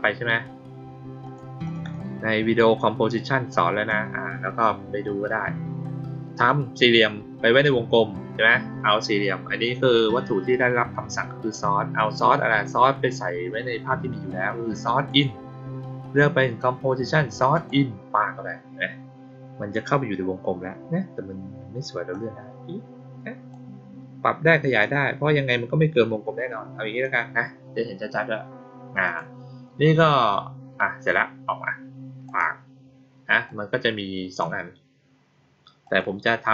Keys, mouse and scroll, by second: 1.2 click, 1.6 click, 1.7 click, 3.1-3.8 drag, 15.0 click, 17.5 click, 22.0-23.4 drag, 24.7-26.9 drag, 29.0 click, 32.2 click, 33.4-34.3 drag, 35.8 click.